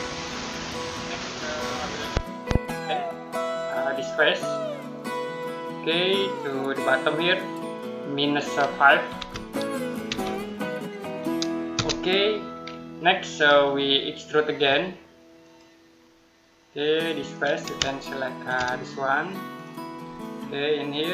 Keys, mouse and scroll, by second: 1.9-3.0 scroll down 1, 3.0 click, 3.8 scroll down 1, 4.8 click, 9.0-9.9 typing, 11.6 Return, 13.3 scroll up 1, 13.6-15.2 scroll down 1, 15.2 click, 15.8 middle click, 17.1 click, 17.7 shift+middle click, 19.4 click, 19.9 middle click.